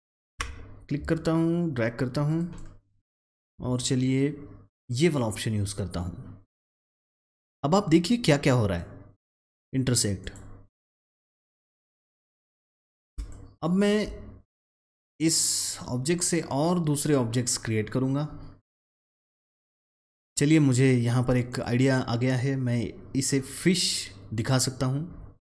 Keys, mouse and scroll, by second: 2.5 double click, 3.1-10.1 drag, 10.1 click, 13.1 space, 13.2 click, 14.1 space, 21.4 click.